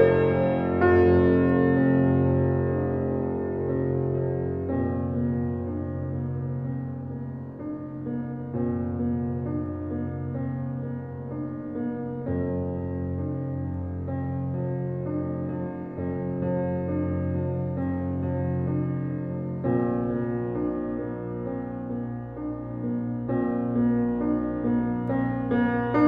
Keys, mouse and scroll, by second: 0.1 click, 1.3-1.7 scroll up 1, 1.8 click, 2.3-2.7 scroll down 1, 3.2-3.7 scroll up 1, 3.7 click, 4.9-6.3 typing, 6.7 Return, 7.3 click, 8.5 scroll down 1, 11.2 ctrl+s, 12.5 scroll up 1, 14.0-14.5 scroll down 1, 14.5 scroll up 1, 15.3 click, 15.7 scroll down 1, 16.2 click, 21.8-22.1 scroll up 1, 22.1-22.8 scroll down 1, 23.4 scroll up 1, 24.3 scroll down 1, 24.9 scroll up 1, 25.7-26.0 scroll down 1.